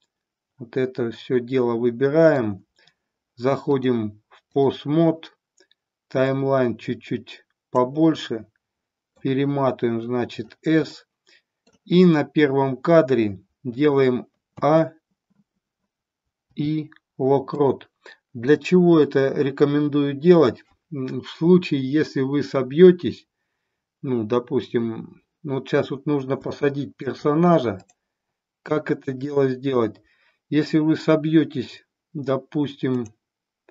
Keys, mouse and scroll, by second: 1.2-2.4 middle drag, 3.7-4.7 drag, 6.2-7.9 drag, 8.4 middle click, 10.8 middle click, 14.5 a, 16.4 i, 26.4-27.2 shift+middle drag, 27.7-30.7 drag.